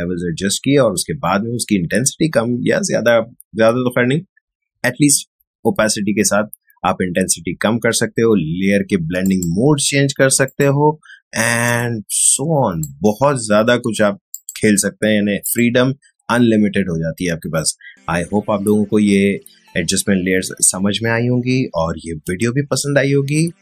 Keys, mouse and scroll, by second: 9.3 shift+click.